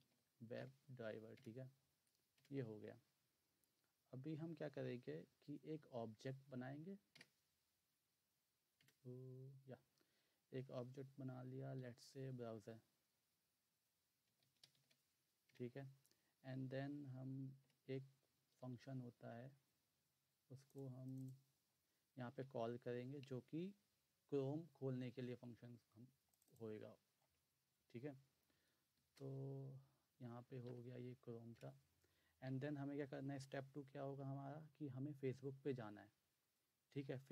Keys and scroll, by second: 0.0-0.6 typing, 1.4 Return, 2.4 Return, 7.2 BackSpace, 8.7 BackSpace, 8.8 Return, 11.6-12.5 typing, 14.0-15.5 typing, 17.1-18.5 typing, 22.4 ., 29.0 (, 30.7 Right, 31.5 Return.